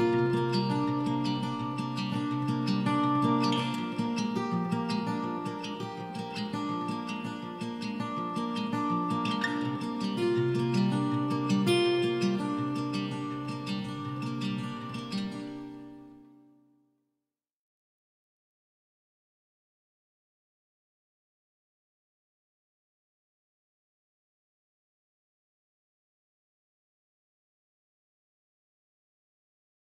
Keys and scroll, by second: 1.1 s, 3.9 Escape, 8.7 m, 9.6 Escape, 15.5 Escape, 18.5 Escape, 19.4-20.3 typing, 23.7 Escape, 25.3 m, 27.4 Escape.